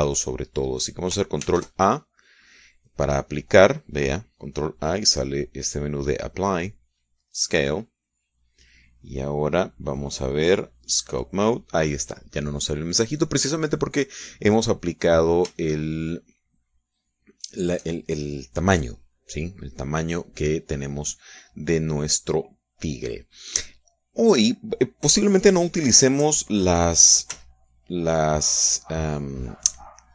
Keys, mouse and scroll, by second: 2.5 ctrl+a, 8.2 click, 11.0 click, 12.0 click, 16.7-18.8 shift+middle drag, 23.2-26.5 drag, 26.5-27.9 middle drag, 27.3 KP_3, 28.4 z.